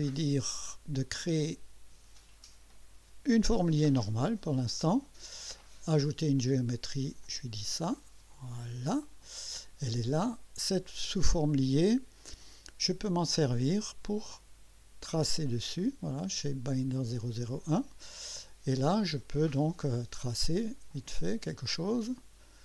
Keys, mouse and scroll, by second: 3.7 click, 6.4 click, 7.2 click, 8.3 click, 13.1 click, 14.2 click, 16.1 click, 17.1 click, 18.2-18.5 scroll up 2, 18.8 right click, 20.9 click, 21.9 click.